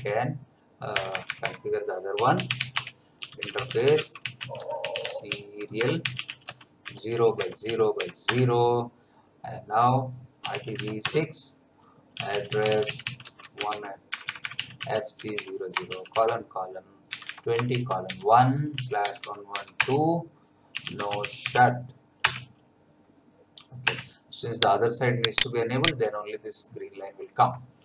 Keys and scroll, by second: 0.0-8.5 typing, 10.1-22.0 typing, 19.8 Return, 22.8 Return, 25.0 Return.